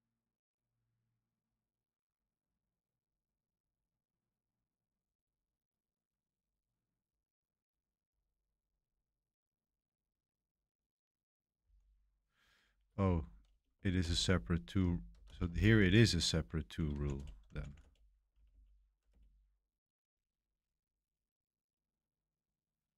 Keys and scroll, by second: 8.3 typing, 11.6 k, 12.8-18.9 typing, 16.3 Escape, 19.0 Return.